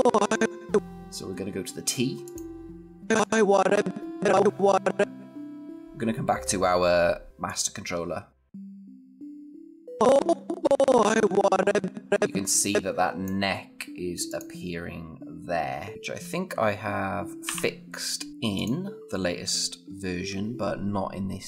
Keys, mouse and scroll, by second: 7.3-9.9 click, 17.3 o, 18.3 click, 19.3 scroll down 1.